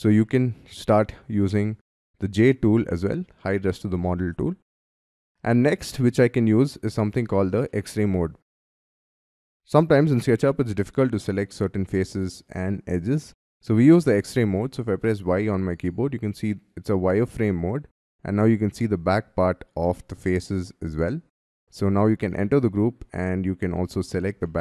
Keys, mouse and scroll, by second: 0.1 scroll up 4, 0.7 scroll down 5, 1.3-2.2 scroll down 7, 2.2 scroll up 5, 3.6 scroll down 2, 5.5-6.1 scroll down 5, 6.1 scroll up 3, 6.9 scroll down 4, 7.7 shift+middle click, 9.4 scroll down 6, 10.0 scroll up 4, 10.3 middle click, 11.6 scroll down 4, 13.2-13.7 scroll down 5, 13.7-14.5 scroll up 5, 15.2 y, 15.9 scroll down 4, 16.4-17.3 scroll up 4, 17.3 scroll down 5, 17.9 middle click, 18.9 scroll up 5, 19.8 middle click, 21.8 double click, 22.3 middle click, 23.3 middle click, 24.4 middle click.